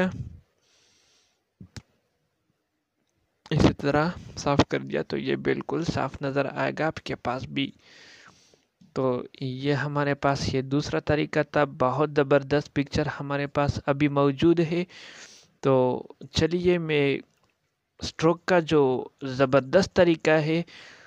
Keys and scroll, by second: 1.1 alt+space, 18.0 ctrl+a.